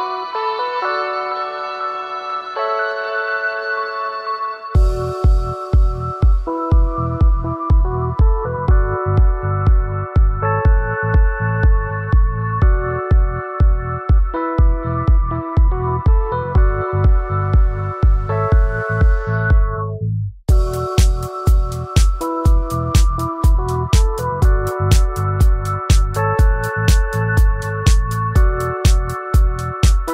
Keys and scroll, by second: 9.0 ctrl+z, 28.0 ctrl+z.